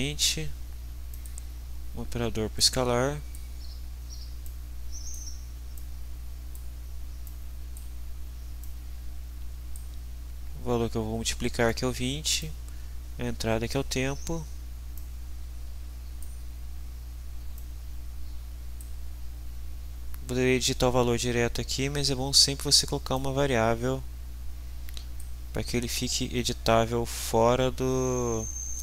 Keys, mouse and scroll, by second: 1.1 click, 2.6-3.6 drag, 4.4-5.3 drag, 5.7-6.8 drag, 7.3-8.0 drag, 8.6-9.9 drag, 12.4-13.9 drag, 14.9-16.4 drag, 17.5-19.0 drag, 23.2-25.4 drag.